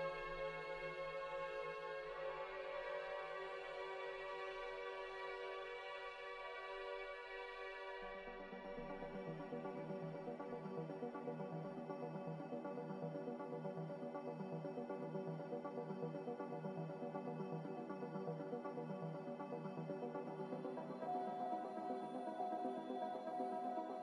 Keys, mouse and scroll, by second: 2.1 m, 6.8 z, 7.8 b, 12.6 Delete, 13.2 m, 14.4-15.2 typing, 17.1 ctrl+b, 20.7 a.